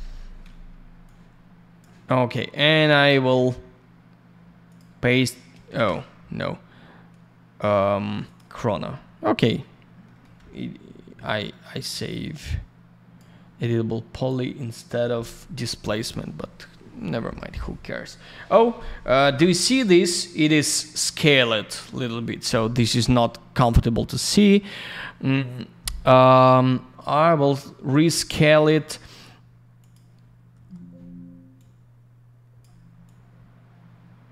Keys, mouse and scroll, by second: 0.0 F4, 1.0 click, 2.5 right click, 2.6 right click, 4.7 click, 4.7 click, 5.7 ctrl+я, 8.2 click, 8.3 click, 10.0 middle click, 10.2 middle click, 12.2 click, 14.1 click, 14.2 click, 17.9 scroll up 1, 18.5-19.0 scroll down 1, 19.5 scroll up 1, 20.1 scroll down 1, 21.9 click, 22.0 click, 24.3 click, 24.4 click, 24.6 click, 24.7 double click, 26.3 click, 26.5 click, 27.8-28.1 scroll down 1, 28.5 click, 28.6 click, 29.8 click, 29.9 click, 30.5 k, 31.5 click, 33.0 click.